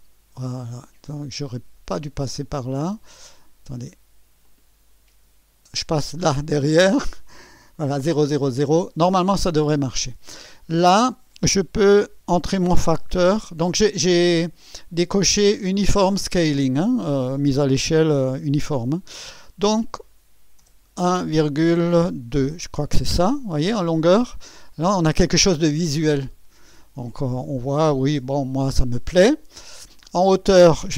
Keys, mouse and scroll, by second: 2.6 click, 4.4 click, 8.3 click, 13.0 1, 20.6 ,, 22.5 KP_2, 24.8 scroll up 2, 30.0 click.